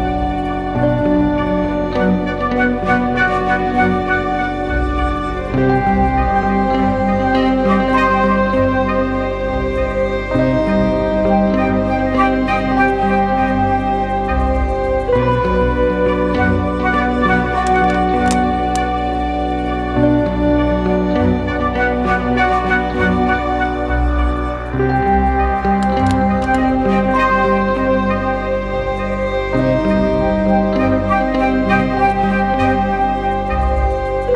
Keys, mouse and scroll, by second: 1.7-2.3 typing, 2.6 double click, 7.2 double click, 22.8 ctrl+t, 23.9 alt+shift+click, 26.9 alt+shift+click.